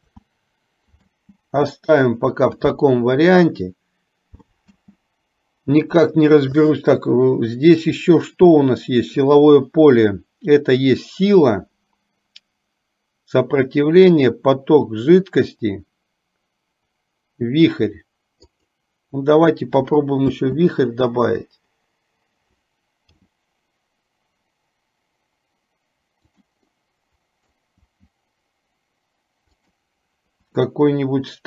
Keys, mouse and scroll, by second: 0.4 ctrl+z, 1.3 space, 4.9 space, 7.9-19.0 drag, 20.5 space, 23.3 g, 26.9 middle click, 27.9 g, 30.8 r.